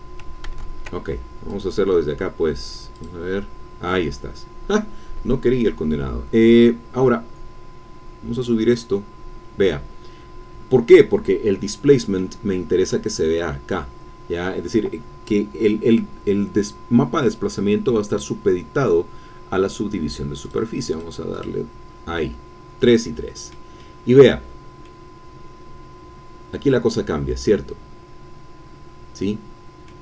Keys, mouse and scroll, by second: 0.4 ctrl+z, 1.5 click, 2.9 click, 4.9-5.3 scroll down 2, 5.3 middle click, 5.7 click, 7.0-7.5 scroll down 2, 8.7 click, 11.7 middle click, 12.4-13.1 scroll up 1, 20.4 click, 21.3 click, 22.9 middle click, 23.8 middle click, 24.5-24.8 scroll down 1, 24.8 middle click, 25.0-25.7 scroll down 1.